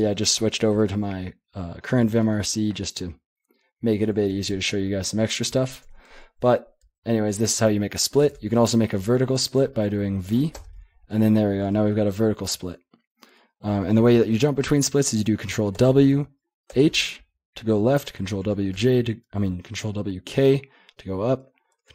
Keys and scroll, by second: 0.0 ctrl+j, 5.5 ctrl+k, 6.1 ctrl+j, 6.4 ctrl+k, 6.8 ctrl+j, 8.2 :, 9.1 ctrl+p, 9.5 ctrl+a, 10.2 v, 10.5 Return, 11.7 ctrl+h, 12.1 ctrl+l, 15.7 ctrl+w, 16.7 h, 18.3 ctrl+w, 18.7 k, 21.8 ctrl+w.